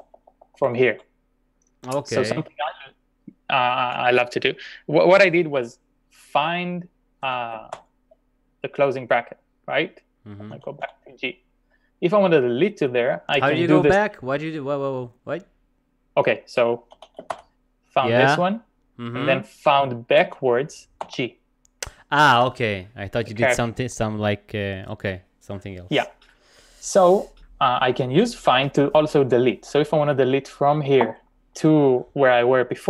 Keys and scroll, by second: 3.0 typing, 7.3 f, 7.7 shift+0, 10.4-11.3 typing, 16.7-17.8 typing, 20.2 shift+f, 21.0 g.